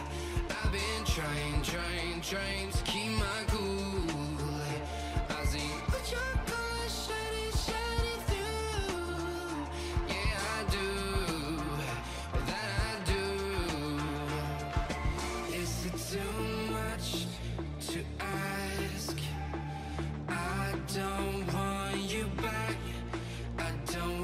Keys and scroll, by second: 2.7 i, 21.3 i.